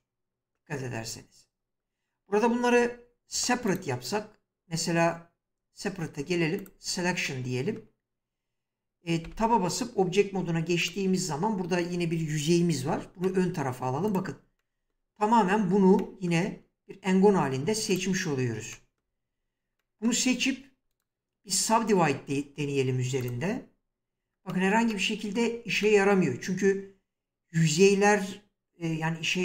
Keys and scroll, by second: 9.3 Tab, 12.8 g, 17.2 Tab.